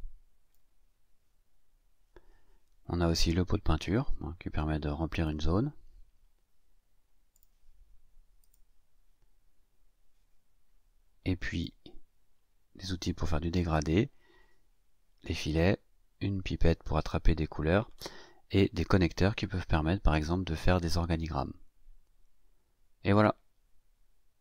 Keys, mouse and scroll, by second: 5.1 click, 7.3 click, 8.4 click, 11.4 click.